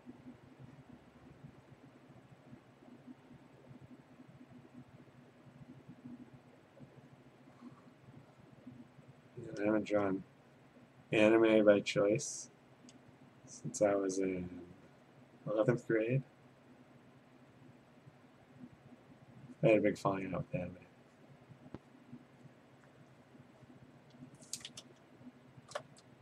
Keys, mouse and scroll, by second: 0.2 click, 1.0 click, 1.7 click, 3.7 click, 4.8 click, 5.7 click, 6.7 click, 7.2 click, 8.2 click, 8.8 click, 9.4 click, 10.6 click, 11.8 click, 13.3 click, 19.4 click, 19.8 click, 21.3 click, 22.0 click, 22.5 click, 25.2-25.7 scroll.